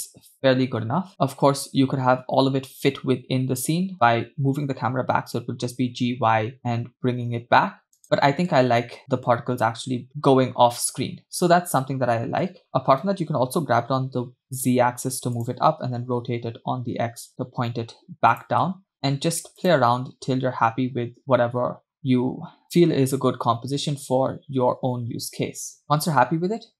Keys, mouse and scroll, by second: 1.1 space, 4.0 space, 5.3 g, 8.5 space, 12.5 space, 13.1 g, 15.9 r, 18.7 space, 19.6 click, 26.1 space.